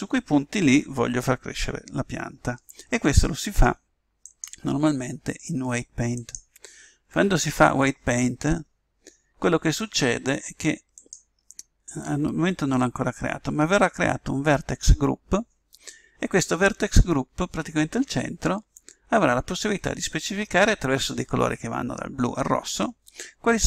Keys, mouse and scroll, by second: 4.2 click, 5.6 click, 10.9 click.